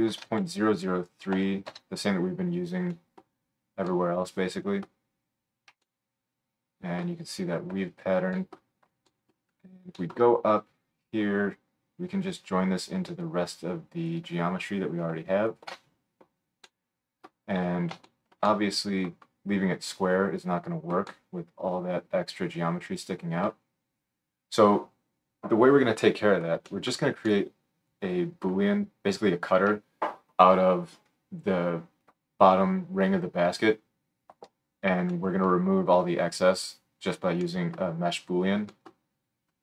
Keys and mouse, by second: 0.2 KP_0, 7.7 click, 7.7 right click, 13.2 drag, 13.2 right drag, 15.6-39.6 alt+shift+right drag.